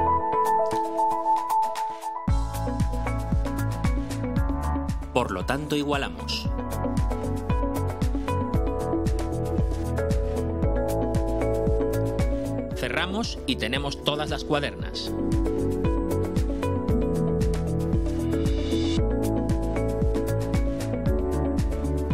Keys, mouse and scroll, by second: 0.0-2.2 right drag, 3.2 click, 5.6 4, 6.2 ., 6.5 5, 7.1 Return, 11.5 scroll down 2, 13.3 click, 15.8-18.0 drag, 18.4-19.4 right drag, 21.3 click.